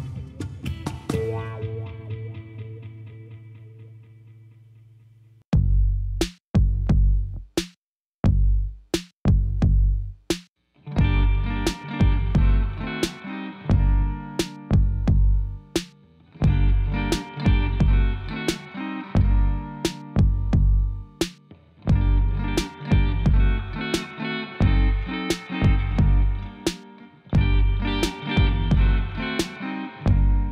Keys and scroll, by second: 0.7 5, 1.5 Return, 15.1-16.3 typing, 17.5-19.4 typing.